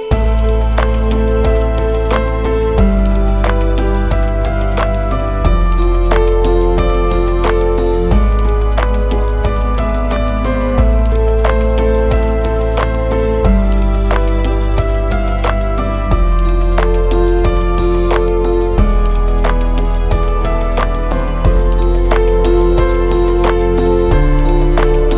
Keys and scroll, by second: 0.0-1.7 typing, 4.8 ctrl+c, 11.0 ctrl+v, 20.1 4, 24.0 p, 24.7 BackSpace.